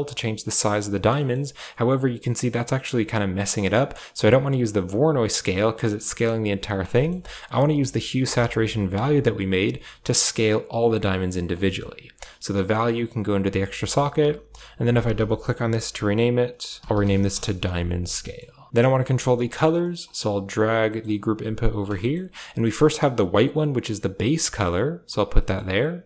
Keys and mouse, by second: 0.2 click, 1.1 middle click, 1.9-6.5 shift+drag, 6.9 middle click, 7.5 click, 8.4-11.3 shift+drag, 11.6 drag, 12.6-13.5 drag, 14.4 click, 14.6-17.2 drag, 18.2 middle click, 19.4 click, 19.7 middle click, 20.4 g, 21.0 g, 22.4 click, 23.5-25.0 drag, 25.2 middle click, 26.0 click.